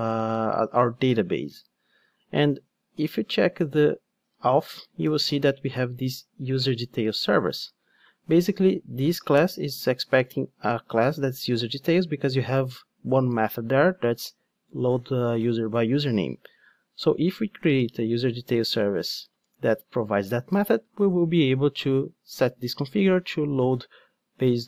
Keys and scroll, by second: 3.2 Tab, 6.7 Return.